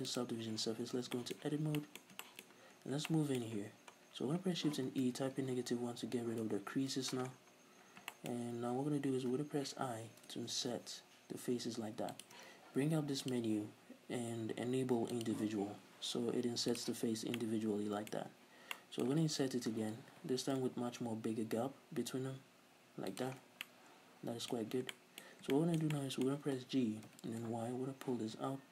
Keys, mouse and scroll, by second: 0.1 click, 0.7 Tab, 0.9 scroll down 1, 1.1 shift+middle click, 1.5 scroll up 2, 1.8 middle click, 2.5-2.9 scroll up 2, 2.6-12.3 middle drag, 3.9 scroll down 1, 4.8 shift+e, 6.5 Return, 7.3-9.3 scroll up 4, 9.3-9.8 scroll up 1, 9.8 typing, 12.3 shift+click, 13.3 click, 15.3-16.5 drag, 16.7 click, 17.1 scroll down 2, 17.4-18.3 middle drag, 18.2 scroll up 2, 18.3 click, 18.7 middle click, 19.3 ctrl+z, 20.3 i, 22.0 click, 23.5 scroll down 2, 23.7-28.7 middle drag, 26.8 g.